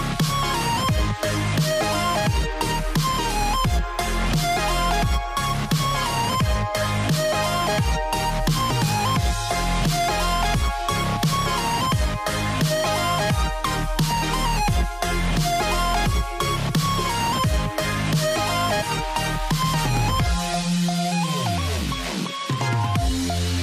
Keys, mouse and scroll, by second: 1.8-7.5 drag, 9.9-19.0 drag, 19.1-21.8 drag, 21.8-23.5 scroll up 15.